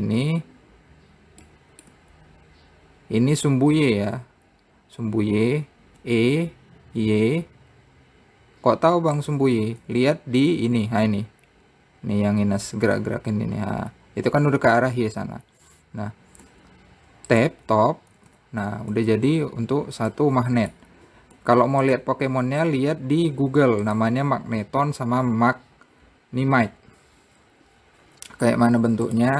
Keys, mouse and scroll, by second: 0.3 shift+click, 2.1-4.7 middle drag, 6.6 e, 10.4 Tab, 18.9 Tab, 19.5 Tab, 20.2-20.7 scroll down 1, 20.7-21.9 middle drag.